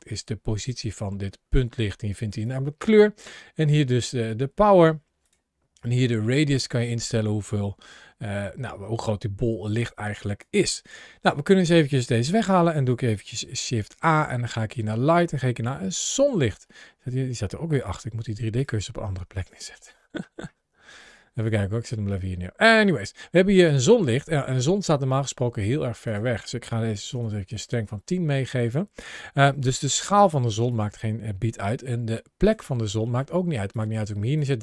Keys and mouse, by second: 2.2 click, 4.1 click, 5.6-10.2 drag, 12.1 x, 13.2 shift+a, 16.6 middle click, 17.8 g, 18.4 click, 19.3 shift+right click, 19.8-20.1 middle drag, 21.3-21.6 middle drag, 21.9 shift+right click, 22.3-22.8 middle drag, 23.6 shift+middle click, 25.9-27.0 drag, 29.2 s, 30.5 click, 31.5 g, 33.0 middle click, 33.2 g, 33.5 click, 33.8 g, 34.2 click, 34.4 g.